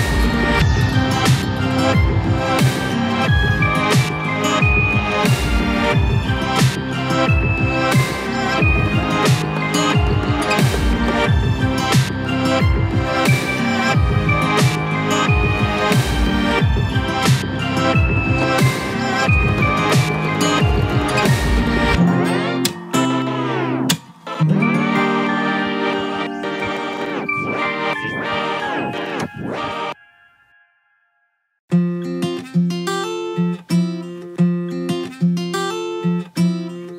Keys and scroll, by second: 5.3 ctrl+a.